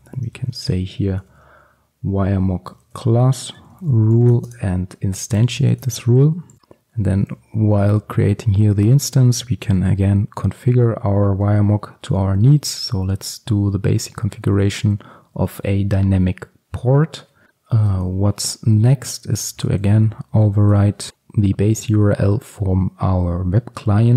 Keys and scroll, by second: 6.6 Return, 20.7 Return.